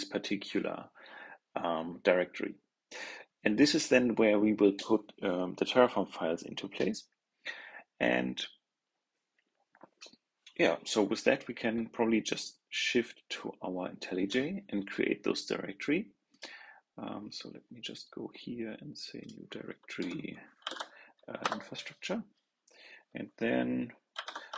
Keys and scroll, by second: 20.6 super+v, 24.1 super+n.